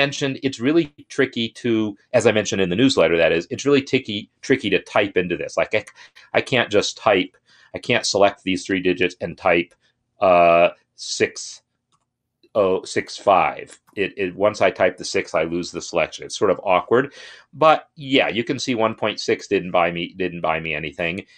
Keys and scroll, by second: 4.7 Left, 5.1 Left, 7.2 shift+Right, 7.4 shift+Right, 7.7 shift+Right, 11.6 typing.